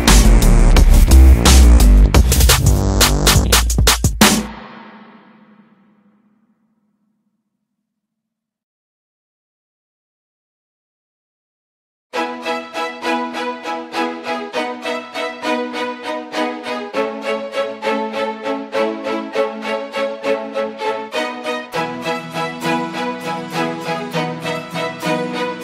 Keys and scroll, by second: 0.9 space, 7.8 Escape, 14.9 space, 20.2 space, 24.2 space.